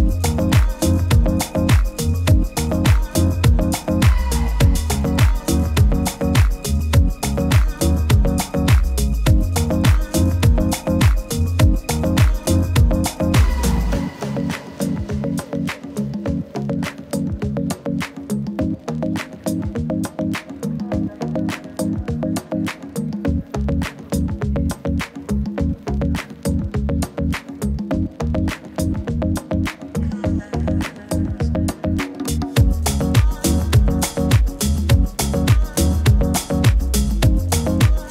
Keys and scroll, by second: 3.5 super+t, 8.4 super+t, 10.8 super+-, 12.1 super+-, 12.2 super+-, 19.2 super+s, 33.5 super+t.